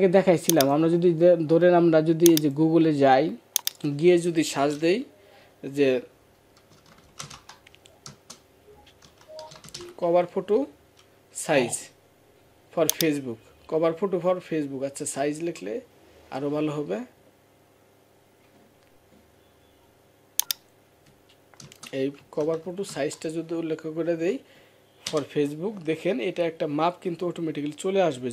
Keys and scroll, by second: 24.9 Return.